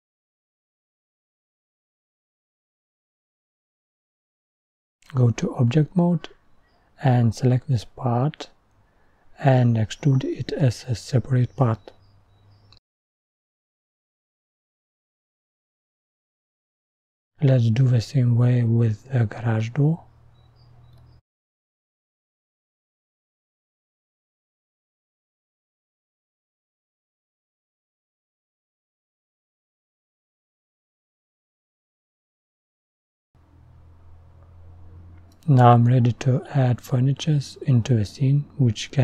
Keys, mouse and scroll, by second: 0.5 e, 1.3-3.5 middle drag, 3.5 click, 3.9 Tab, 4.7-6.5 drag, 6.5-7.5 middle drag, 7.5 Tab, 10.5-11.9 middle drag, 11.9-12.9 scroll down 1, 12.9 click, 13.8-14.5 scroll up 1, 14.5 middle click, 15.2 Tab, 16.6-17.6 middle drag, 17.6 scroll down 1, 18.7-20.3 drag, 20.3 middle click, 20.7 scroll down 3, 21.3 click, 23.3-24.9 middle drag, 24.9 e, 25.9 middle click, 26.2-27.0 scroll down 2, 27.0 Tab, 27.0 click, 27.5 scroll up 5, 27.8 middle click, 28.2 click, 28.6 scroll up 1, 28.9 middle click, 29.2-32.4 scroll down 1, 32.4-32.8 scroll down 1, 32.8-35.0 scroll up 2, 35.0 click, 35.8-38.0 scroll down 3, 38.0 scroll down 1, 38.1 g.